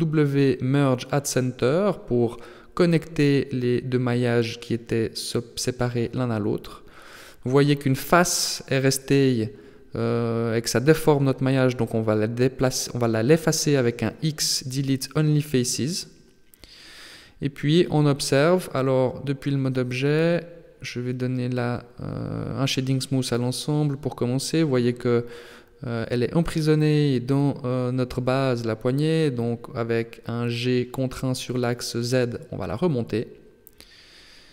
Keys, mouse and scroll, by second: 0.8 w, 3.2 right click, 3.5 shift+right click, 3.8 w, 5.3 right click, 5.6 shift+right click, 5.9 w, 7.3 right click, 7.5 shift+right click, 7.9 w, 10.1 shift+right click, 10.6 shift+right click, 11.4 shift+right click, 11.7 middle click, 14.0 x, 17.1 z, 17.6 z, 17.9 Tab, 18.9 Tab, 19.9 a, 22.5 Tab, 23.5-25.7 scroll down 3, 26.5 click, 27.7 KP_3, 28.5 Tab, 30.1-30.9 scroll up 2, 32.2 g, 34.0 alt+h.